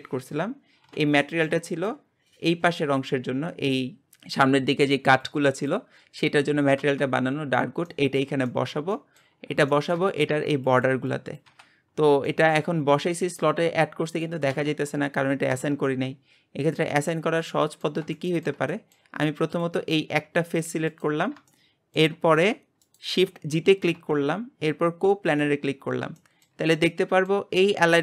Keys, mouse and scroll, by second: 0.4 scroll down 3, 1.2 shift+middle click, 2.1 scroll up 2, 7.7 scroll down 1, 7.8-15.5 shift+middle drag, 9.4-9.7 scroll up 3, 15.5 Tab, 17.4-19.6 middle drag, 19.6 click, 20.9 g, 21.5 shift+middle click, 22.4 g, 25.4 shift+g, 25.8-26.2 scroll down 4, 26.2-27.5 shift+middle drag, 27.5-28.0 scroll up 6.